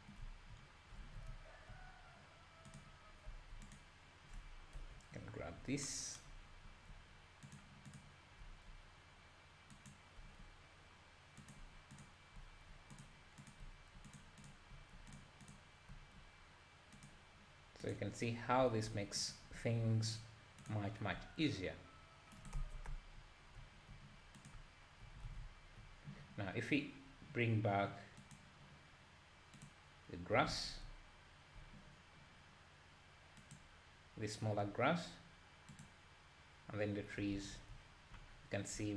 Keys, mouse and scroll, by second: 0.6-1.0 scroll up 2, 1.0 alt+a, 1.3 `, 2.8 click, 3.3 Tab, 3.7 click, 4.8 KP_7, 6.7 g, 8.0 click, 8.4 g, 10.2 g, 12.0 click, 12.4 g, 13.5 click, 13.6 g, 14.5 click, 14.7 g, 15.5 click, 15.9 g, 17.9 click, 18.6 r, 19.6 g, 20.7 click, 21.2 g, 22.9 Tab, 24.5 click, 24.6-25.3 middle drag, 25.3 alt+a, 25.4 `, 28.4 click, 29.7 click, 30.5 alt+a, 30.8 `, 33.7 click, 36.1 click, 37.7 `, 38.4-38.8 scroll down 2, 38.8 `.